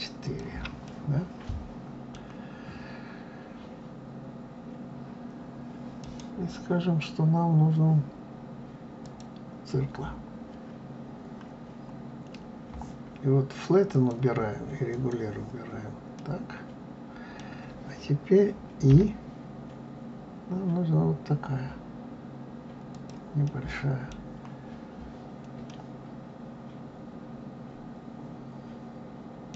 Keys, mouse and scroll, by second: 0.2 shift+click, 0.8-3.8 middle drag, 6.0-13.9 right drag, 13.9 click, 14.9 click, 16.1-18.9 middle drag, 18.9 i, 23.4-28.6 middle drag.